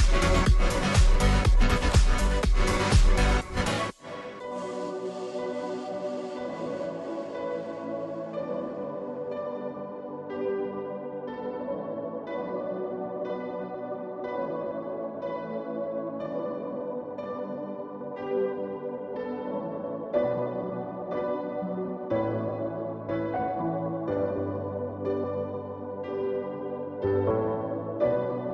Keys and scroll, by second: 0.0-28.5 typing, 16.5 ctrl+t, 21.4 Return, 24.6 ctrl+t, 27.9 Return.